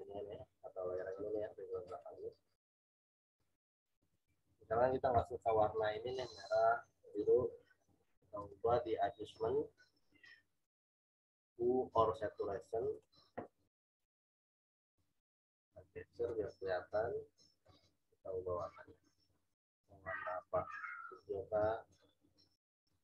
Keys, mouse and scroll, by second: 4.0 click, 7.1 click, 12.9 click, 15.2 click.